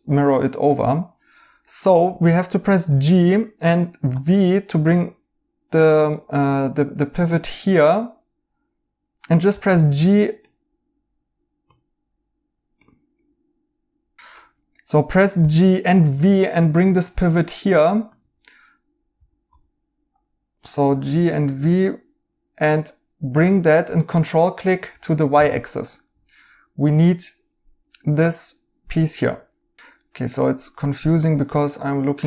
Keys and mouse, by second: 2.8 g, 4.1 v, 9.4 g, 9.6 g, 11.4 Escape, 11.8-12.6 typing, 14.3 Escape, 17.9-19.6 typing, 20.8 typing, 31.0 right click.